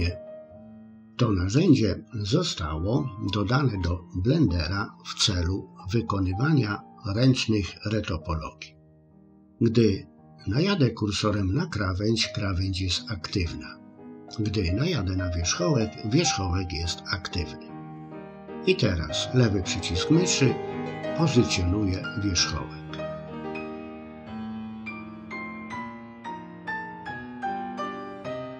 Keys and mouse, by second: 1.5-3.9 middle drag, 19.9-21.5 drag, 21.9 middle click, 23.3 click, 24.9-26.5 drag, 27.4 click.